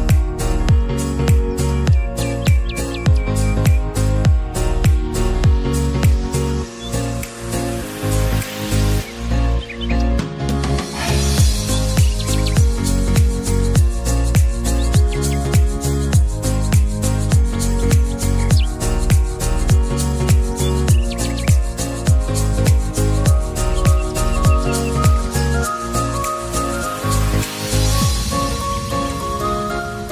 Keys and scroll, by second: 15.7 ctrl+z.